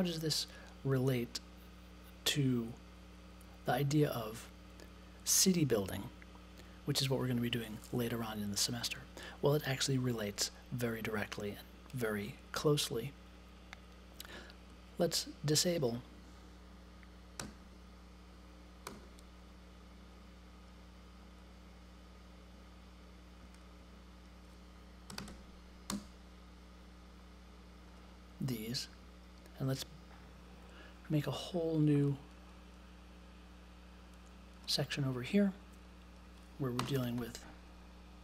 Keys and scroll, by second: 17.1-18.8 typing, 24.8-25.7 typing, 25.9 Return, 36.7 space, 36.9 shift+2.